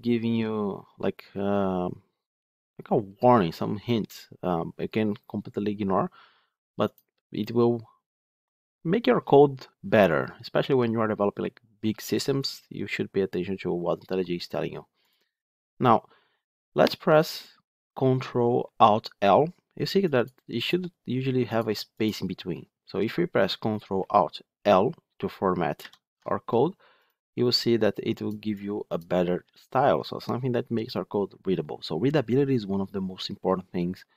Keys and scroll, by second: 25.7 ctrl+alt+l.